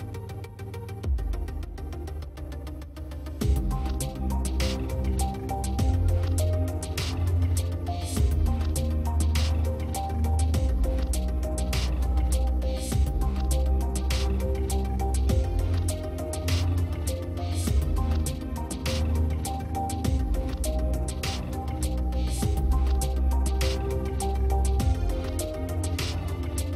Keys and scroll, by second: 6.3 space, 12.7 space, 14.3 space, 16.5 space.